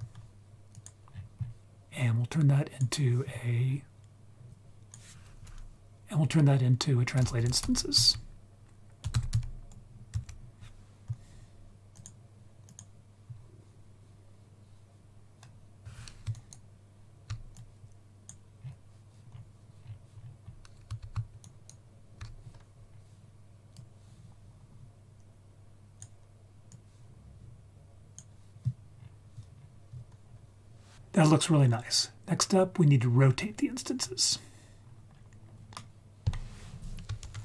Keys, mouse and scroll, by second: 0.7 click, 1.0-2.3 scroll down 4, 2.3-2.9 drag, 3.6-4.5 scroll up 1, 4.5-12.0 drag, 12.7 click, 13.2-15.7 scroll up 2, 16.3 ctrl+click, 16.4 ctrl+right click, 17.5-18.3 drag, 18.5-19.2 scroll down 1, 19.2-20.4 scroll down 5, 20.1-20.6 scroll up 4, 21.4 ctrl+right click, 23.6 scroll down 1, 23.7-26.0 drag, 26.7-28.2 drag, 28.9-29.7 scroll down 4, 30.0-30.8 scroll up 2, 33.1-33.9 scroll up 4, 33.9 scroll down 1, 34.0-34.4 scroll down 1, 34.8-35.7 scroll up 3, 35.7 middle click, 35.7-36.3 scroll up 1, 37.2 shift+a.